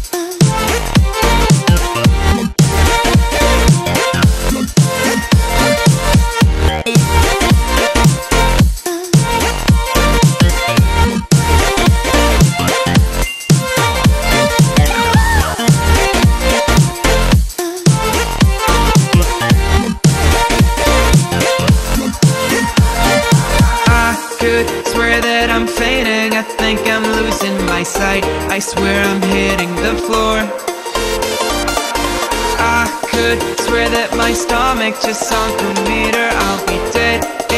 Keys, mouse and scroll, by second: 3.5-4.6 drag, 7.3 click, 13.2 ctrl+click, 14.9 click, 15.4 Left, 15.9 ctrl+=, 16.5-21.0 typing, 16.8 click, 17.8-18.4 click, 20.5 click, 23.5 click, 23.7-27.0 typing, 24.3 ctrl+=, 25.1 click, 26.1 click, 26.9 click, 27.4-30.4 click, 28.1-30.8 drag, 32.9 click, 35.1-36.0 shift+click, 36.1-36.9 drag.